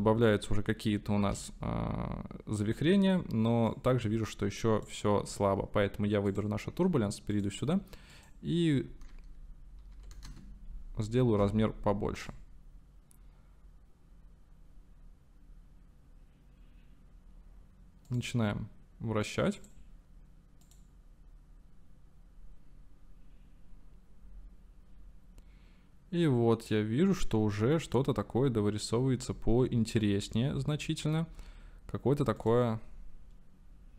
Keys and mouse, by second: 1.3 space, 3.9-5.0 drag, 6.3-7.4 drag, 8.2-10.9 drag, 12.3 click, 18.4 click, 19.6 click, 20.7 click, 32.6 click.